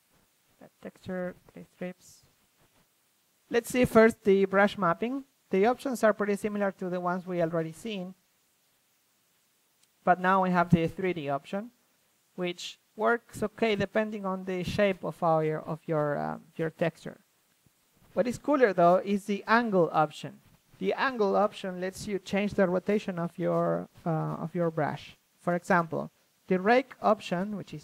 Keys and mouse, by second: 1.9-4.3 drag, 4.3-4.8 middle drag, 4.8 ctrl+z, 8.3-9.5 middle drag, 10.5 click, 12.1-13.1 middle drag, 13.1-14.5 drag, 14.5 middle drag, 14.8 ctrl+z, 15.3-17.2 drag, 16.9 ctrl+z, 18.4 drag, 19.0 a, 20.3 a, 20.8-23.2 drag, 21.3 a, 24.1 a, 24.7-27.0 drag.